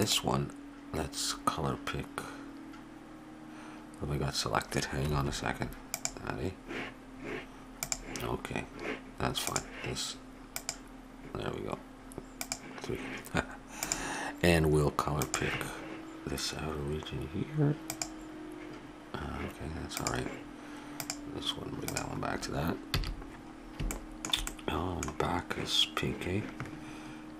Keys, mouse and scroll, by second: 0.0-1.9 drag, 5.9-12.3 drag, 13.8-15.7 drag, 19.9-22.9 drag, 22.9 a, 24.0 click.